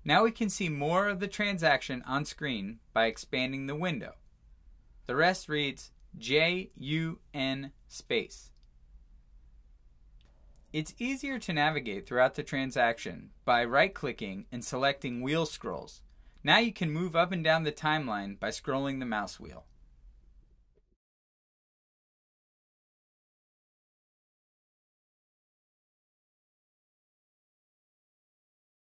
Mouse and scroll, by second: 3.0 click, 6.0 click, 14.2 right click, 15.2 click, 16.1-16.5 scroll.